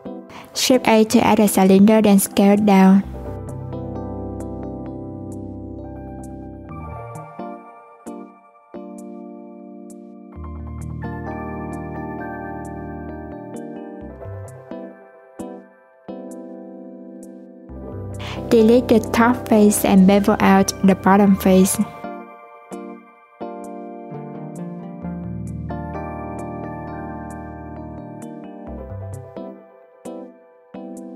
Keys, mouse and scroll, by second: 0.4 click, 1.1 shift+a, 6.4 click, 7.3-7.9 scroll up 1, 7.9 click, 10.7 s, 12.0 click, 13.5 s, 16.3 click, 18.3 Tab, 18.9 alt+z, 19.4 click, 20.4 x, 23.7 click, 25.1 ctrl+b, 29.3 Tab.